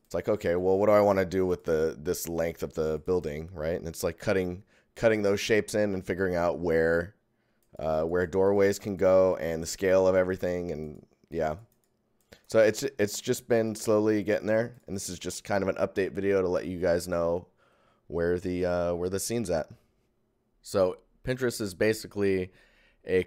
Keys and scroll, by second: 20.7 ctrl+1.